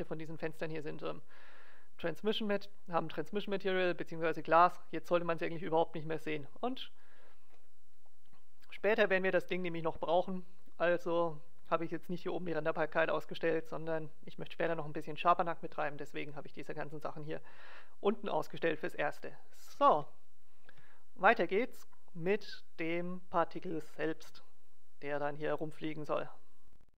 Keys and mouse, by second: 6.6-10.2 middle drag, 13.4 middle click, 20.1-21.6 middle drag.